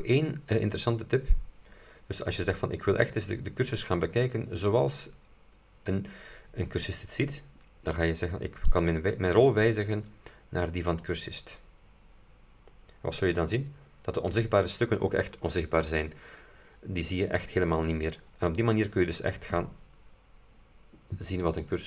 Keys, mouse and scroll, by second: 2.8-3.2 scroll down 2, 4.2-4.5 scroll down 2, 4.9-5.3 scroll down 2, 6.0 scroll down 2, 8.8 click, 11.1 click, 13.5 scroll down 2, 13.9-14.2 scroll up 2.